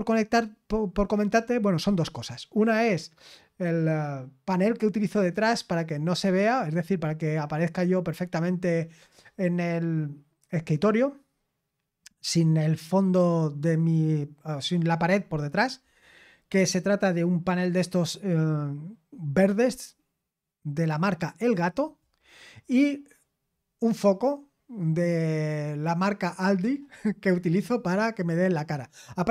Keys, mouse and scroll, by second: 0.0-29.3 scroll down 2.